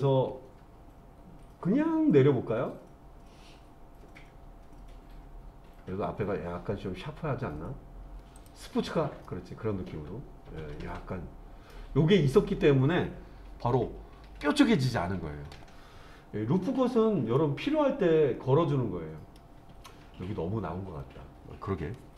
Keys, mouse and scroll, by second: 8.4 click, 9.2-11.7 middle drag, 16.8-17.4 scroll down 1, 17.4-19.4 middle drag.